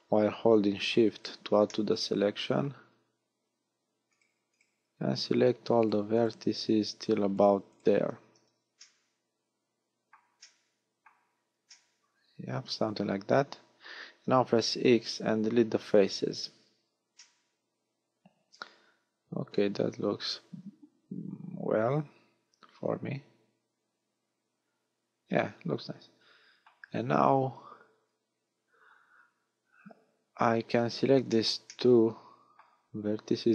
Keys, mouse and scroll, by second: 0.9 shift+right click, 1.2 shift+right click, 1.8 middle click, 3.1-3.5 scroll up 3, 4.1 shift+right click, 4.5 shift+right click, 5.0-5.4 scroll down 3, 5.8 shift+right click, 6.2 shift+right click, 7.2 shift+right click, 7.7 shift+right click, 8.6 z, 8.8 middle click, 10.4 middle click, 11.2-11.7 scroll down 1, 11.7 middle click, 11.7 scroll down 1, 13.2 z, 14.7 x, 17.2 middle click, 30.5-31.3 scroll up 3, 31.3 shift+middle click, 31.3 scroll up 1, 31.7 middle click.